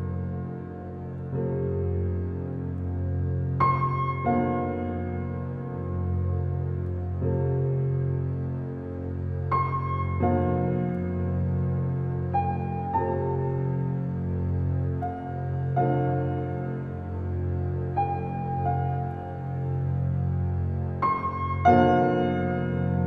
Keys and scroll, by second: 13.1 space, 16.8 space, 20.0 space.